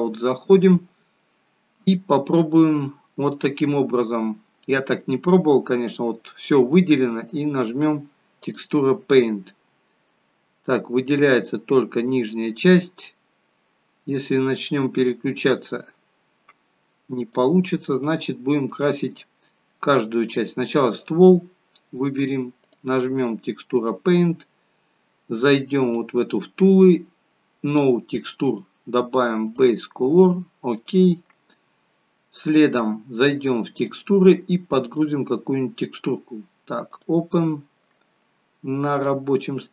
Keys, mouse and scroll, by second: 7.2 click, 17.3 click, 20.2 click, 28.4 click, 33.7 click, 34.8 click.